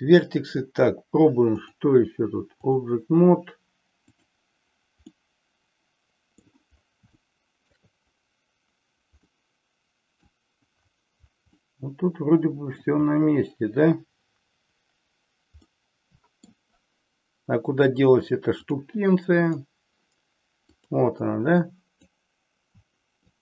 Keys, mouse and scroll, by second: 1.6-2.8 drag, 4.3 drag, 5.2-6.5 middle drag, 7.2 shift+middle click, 9.3-10.5 middle drag, 11.6-12.8 middle drag, 15.9 middle click, 18.6-19.7 drag, 20.7 click, 21.7 click, 23.2 shift+click.